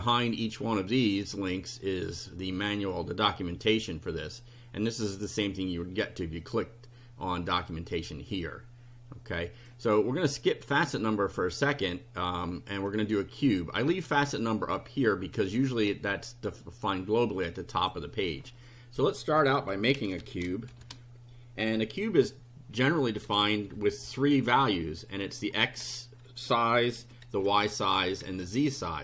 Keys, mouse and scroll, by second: 1.3 click, 6.4 click, 7.6 click, 9.6 click, 10.4 click, 11.8 click, 12.8-17.2 drag, 17.8 click, 19.5-20.7 typing, 23.3 [, 24.1 ], 24.6 BackSpace, 25.7 KP_1, 25.8 KP_0, 27.0-28.3 typing.